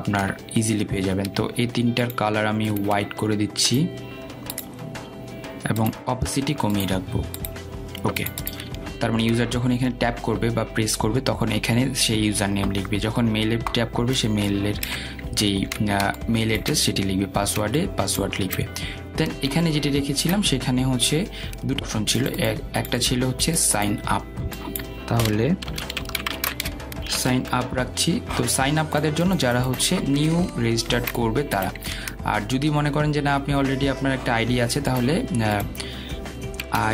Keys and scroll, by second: 0.3 Down.